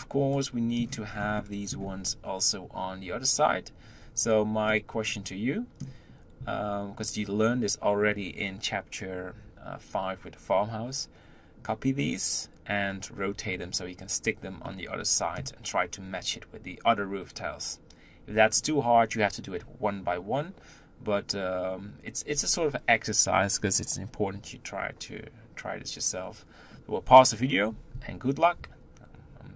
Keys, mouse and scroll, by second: 0.8-1.2 scroll down 1, 1.2-29.5 middle drag.